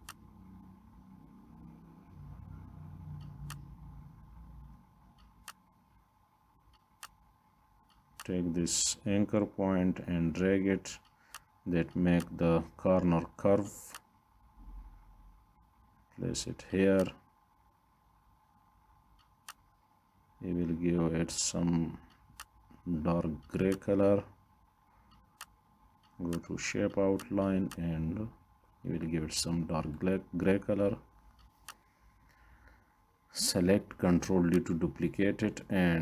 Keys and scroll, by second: 32.9 ctrl+d.